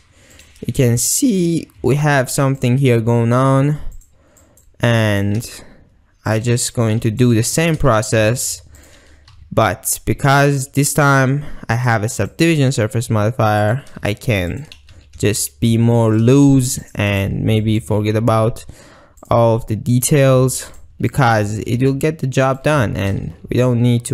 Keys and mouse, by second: 0.4 click, 1.8 r, 3.0 g, 4.6 click, 5.1 click, 5.5 g, 6.4 click, 6.8 click, 8.2 e, 8.9 click, 9.3 r, 10.3 drag, 10.6 g, 11.8-12.4 drag, 12.8 g, 13.7-14.1 drag, 14.5 click, 14.9 g, 16.1 shift+click, 16.5 ctrl+r, 17.2-17.9 drag, 18.1 g, 19.3 drag, 20.0 click, 20.2 g, 20.8 shift+drag, 21.1 click, 21.4 g, 23.3 ctrl+r.